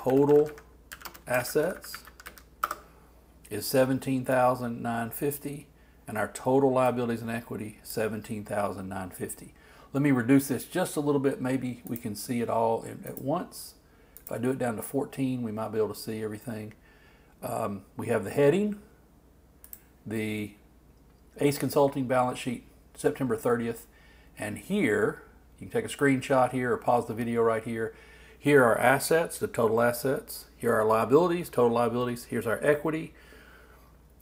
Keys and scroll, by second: 0.0-1.6 typing.